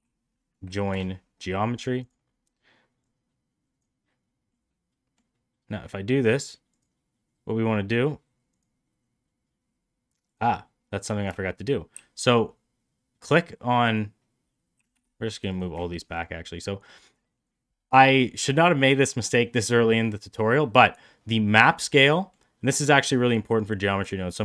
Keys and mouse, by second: 2.9-3.7 drag, 4.4-5.1 middle drag, 6.1 click, 6.6 click, 8.4 click, 10.1 click, 10.8 middle click, 11.8 shift+s, 14.8 Escape, 15.4 click, 22.1 middle click, 22.6 click.